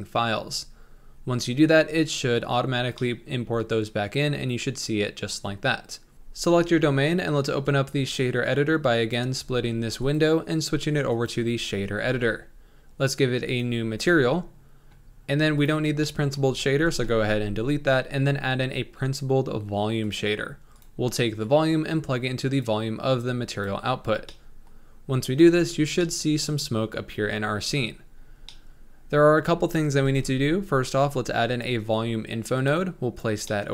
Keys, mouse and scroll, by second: 0.0-2.5 drag, 2.5-2.9 scroll down 2, 2.9-6.7 middle drag, 7.8-12.1 drag, 12.1 n, 14.5 click, 15.2-15.6 scroll up 2, 16.7 x, 17.3 shift+a, 22.6 click, 23.2 click, 24.2-27.7 middle drag, 27.7-28.1 scroll up 3, 28.2-28.6 scroll down 4, 28.6 middle click, 29.5 shift+a.